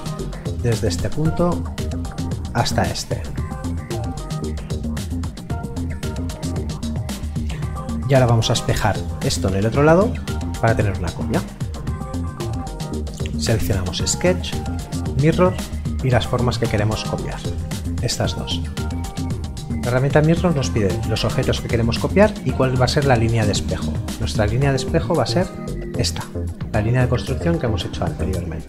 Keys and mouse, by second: 13.3 click, 24.0 click.